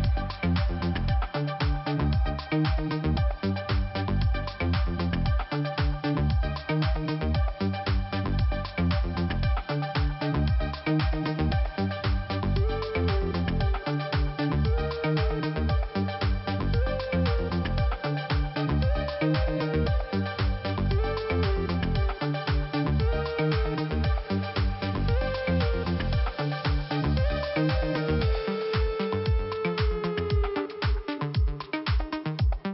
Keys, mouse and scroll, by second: 1.2 click, 2.7 click, 3.7 click, 3.8 click, 4.6 Delete, 5.8 click, 6.6 click, 6.7 click, 6.9 Delete, 7.8 click, 8.8 click, 9.1 double click, 9.9 f, 10.7 scroll down 2, 11.3 scroll up 1, 14.0 scroll down 2, 14.5 scroll up 1, 15.4 click, 16.6 scroll down 1, 17.3 scroll down 1, 19.9 scroll down 1, 20.4 scroll up 1, 21.1 click, 24.6 click, 29.4 scroll down 1, 29.9 scroll up 1, 31.2 click, 31.6 scroll down 1, 32.0-32.3 scroll up 1.